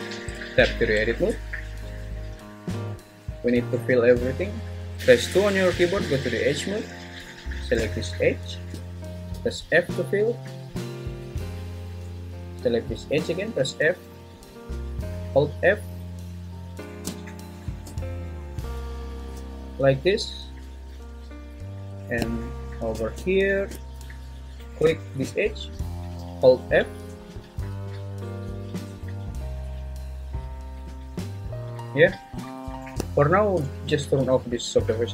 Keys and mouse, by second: 0.3 Tab, 4.9 2, 5.3 2, 9.4 f, 13.3-16.9 typing, 19.4 f, 24.5 click, 26.2-27.7 f, 32.0 `.